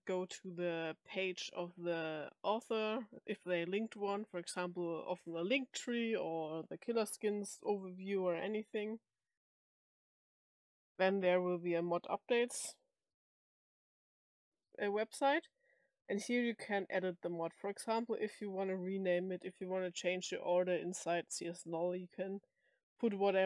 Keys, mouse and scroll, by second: 16.4 click, 18.0 click, 22.8 click.